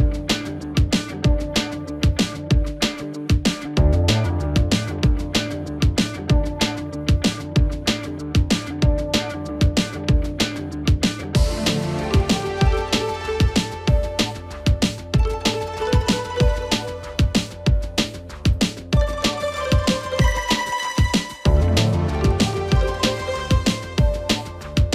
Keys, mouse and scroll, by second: 1.2 right click, 7.2 right click, 7.2 click, 9.5 click, 12.2-14.2 drag, 14.2-14.7 scroll up 1, 15.6 click, 16.5 right click, 17.1 click, 17.9 ctrl+space, 19.6 g, 22.0 click, 24.5-24.9 drag.